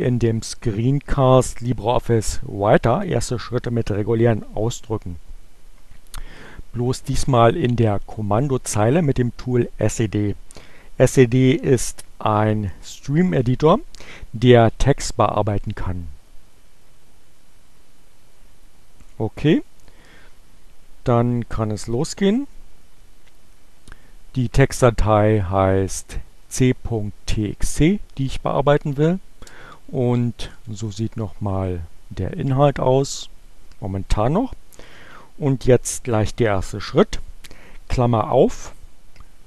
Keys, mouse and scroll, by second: 26.0 click, 27.1-28.1 typing, 29.6 space, 30.1 t, 31.3 x, 32.3 t, 32.5 Return.